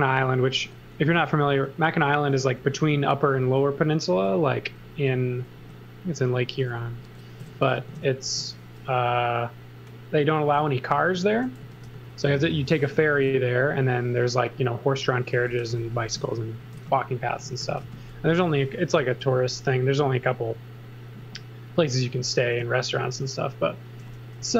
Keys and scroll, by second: 0.2 x, 0.6 v, 1.1 s, 2.6 m, 4.6 v, 5.6 s, 7.2-8.2 typing, 11.4-14.2 typing, 15.3-19.2 typing, 24.4 b.